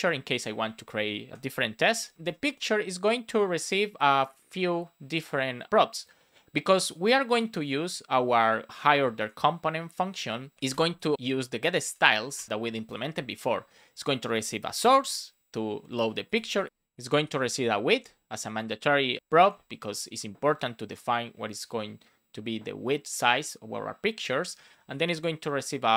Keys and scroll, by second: 1.3 space, 1.5 shift+0, 2.1 BackSpace, 3.2 Return, 11.1 shift+s, 12.3 Return, 14.7 Return, 16.6 BackSpace, 18.5 Return.